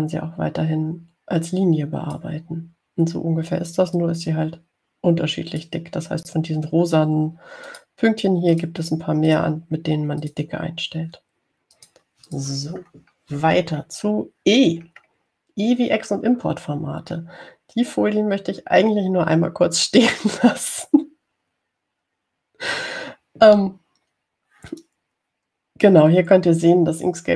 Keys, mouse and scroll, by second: 1.1-3.6 drag, 5.2-7.1 drag, 8.9 click, 9.8 click, 10.5 click, 11.5 click, 13.0 click, 13.5 click, 14.1-15.4 scroll down 4, 15.8-17.4 scroll down 1, 18.3-18.9 scroll down 1.